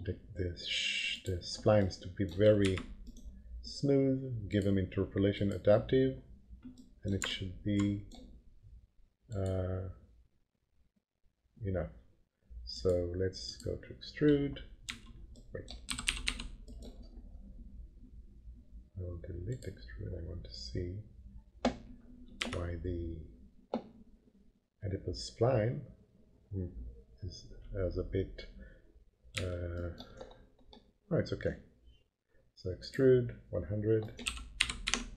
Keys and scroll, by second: 2.6 F3, 14.8 F3, 15.6-16.7 typing, 22.4 F3, 29.3 F3, 34.2 p, 34.6 f, 34.8 F3.